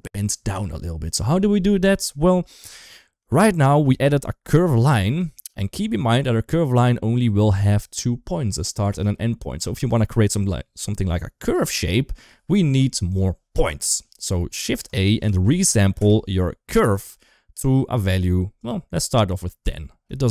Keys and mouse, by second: 2.0 shift+middle click, 3.7 shift+middle click, 5.1 shift+middle click, 8.9 shift+middle click, 14.4 shift+a, 17.0 g, 20.0 shift+middle click.